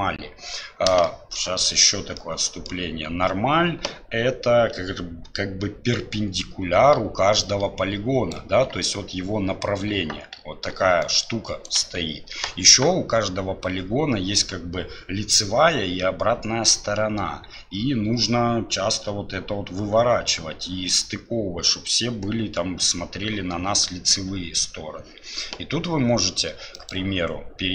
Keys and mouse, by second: 1.2 shift+middle click, 2.3 middle click, 7.5 click, 8.3-27.7 d, 26.7-27.7 drag.